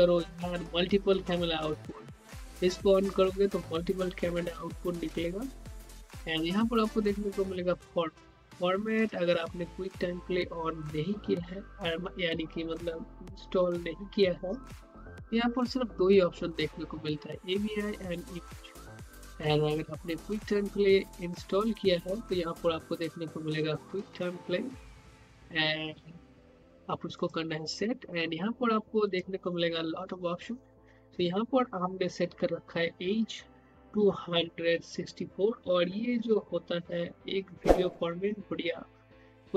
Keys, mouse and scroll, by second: 8.9 click, 27.1 click.